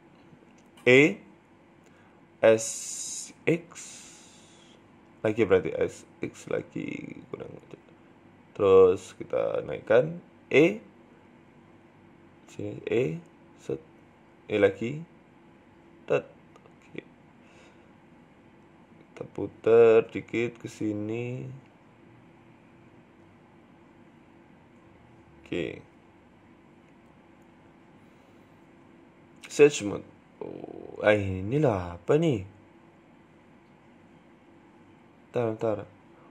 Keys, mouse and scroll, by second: 0.8 e, 1.2 s, 2.4 s, 4.4 KP_3, 5.0 middle click, 5.6 s, 7.7 KP_3, 8.8 g, 10.3-12.8 typing, 14.8 g, 15.4 e, 16.6 scroll up 1, 16.6-16.9 scroll down 1, 16.9 shift+middle click, 17.9 r, 18.8 g, 21.4 click, 22.1 right click, 22.4 alt+shift+right click, 23.4 g, 24.4 r, 25.5 Tab, 25.6-26.6 scroll down 12, 25.8 middle click, 26.3 middle click, 26.6-27.0 scroll up 10, 27.0 middle click, 27.3 scroll down 1, 27.5 shift+middle click, 28.3-28.9 scroll down 2, 28.6-29.3 scroll up 2, 28.9 w, 29.6 scroll down 1, 29.8 middle click, 30.5-31.6 scroll up 4, 31.0 middle click, 31.6 middle click, 32.0 Tab, 32.3 middle click, 33.1 right click, 34.5 ctrl+z, 34.9 scroll up 2, 35.5 scroll down 1, 35.7 middle click, 36.1 right click.